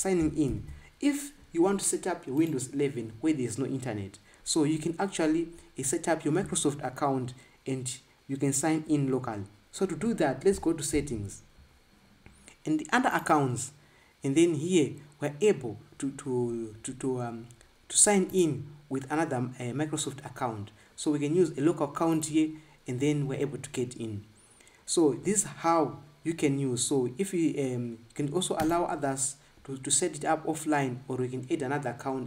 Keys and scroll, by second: 1.2 ctrl+b, 11.7 super+i.